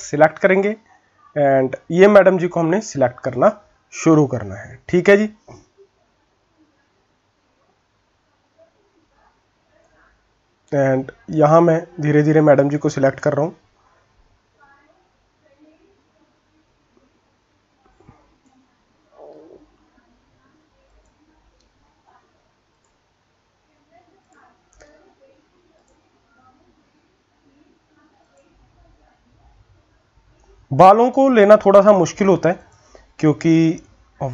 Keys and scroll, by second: 0.6-2.1 typing.